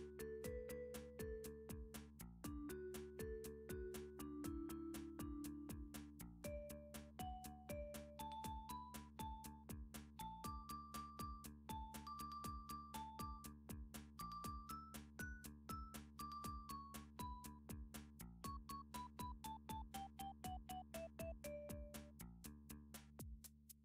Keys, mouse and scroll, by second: 1.3 click, 2.5 click, 3.1 click, 5.4 Tab, 7.7 click, 9.1 click, 9.9 click, 10.4 middle click, 10.5 middle click, 10.9 middle click, 11.3 shift+middle click, 11.3 shift+middle click, 11.6 middle click, 11.7 middle click, 15.1 middle click, 16.0 g, 16.5 z, 19.3 g, 21.1 z, 21.2 click, 22.1 middle click, 22.3 scroll up 5, 23.3 7.